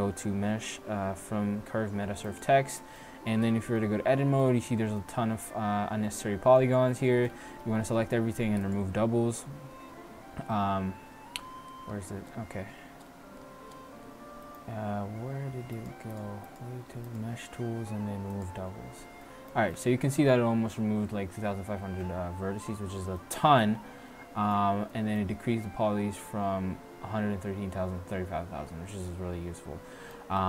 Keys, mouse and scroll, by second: 3.1 Tab, 6.1 middle click, 7.4 a, 7.6 a, 7.9 a, 8.6 a, 8.7 click, 9.7 a, 10.0 a, 10.6 middle click, 12.0 Tab, 12.8 Tab, 13.5 Tab, 14.2-15.8 middle drag, 15.8-18.7 drag, 19.4 click, 20.3-21.9 middle drag, 24.5-27.9 middle drag, 28.7-30.0 middle drag, 30.3-30.4 middle drag.